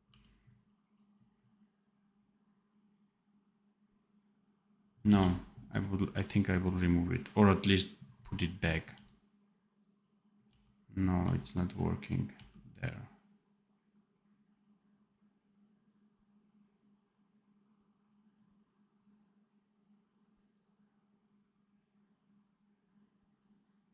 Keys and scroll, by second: 0.0 d, 4.9 d, 8.8 d, 10.4 d, 12.3 d.